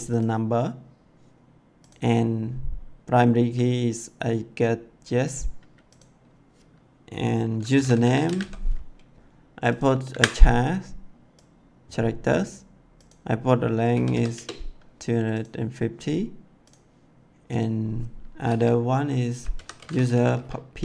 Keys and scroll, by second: 7.7-8.3 typing, 10.0 c, 13.9 2, 14.0 5, 14.3 0, 19.5-20.8 typing.